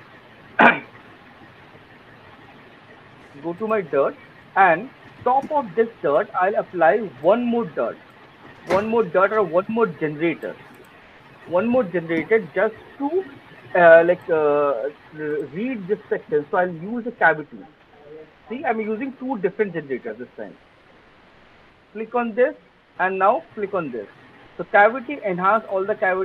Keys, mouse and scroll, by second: 2.8 alt+middle click, 3.2 click, 8.3 click, 9.5 click, 10.7 right click, 20.1 click, 23.4 alt+click, 24.5 alt+middle click, 25.1 alt+middle click, 26.0 alt+middle click.